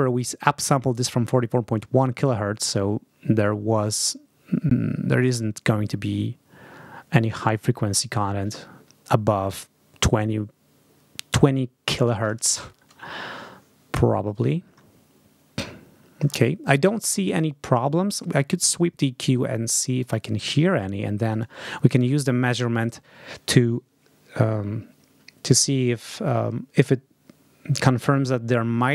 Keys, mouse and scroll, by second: 19.9 click, 20.0 scroll up 2, 21.3 click.